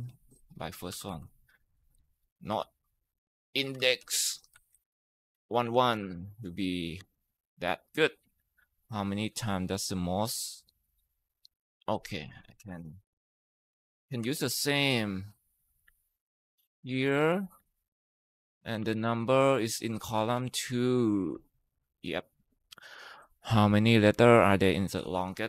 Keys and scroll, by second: 0.5-1.8 typing, 2.4 ctrl+z, 2.8-6.8 typing, 12.5 =, 13.7 BackSpace, 14.0 ctrl+v, 15.6 Escape, 17.0 ctrl+c, 17.4 Escape, 18.7 ctrl+v, 20.0 BackSpace, 20.2 BackSpace, 21.1 Tab.